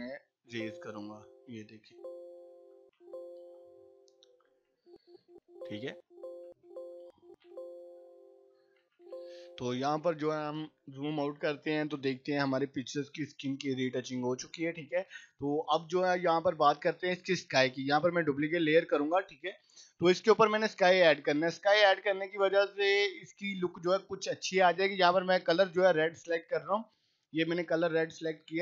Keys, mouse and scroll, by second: 0.3 [, 0.8-2.7 click, 1.6 ], 1.7 click, 2.8 [, 3.1-4.6 drag, 4.5 scroll down 1, 4.7-7.2 typing, 5.6-5.9 click, 6.1 click, 6.5-7.1 click, 7.9 scroll down 1, 8.8 [, 9.7 click, 10.0 right click, 10.3 click, 14.7 right click, 15.0 click, 18.3-19.0 drag.